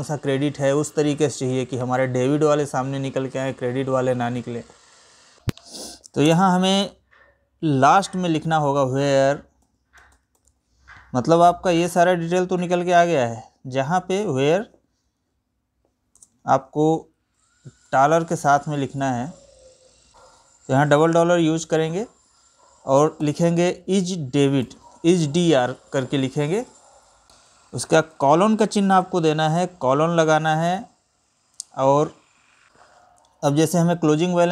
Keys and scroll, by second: 5.4 Right, 5.9 space, 15.7 space.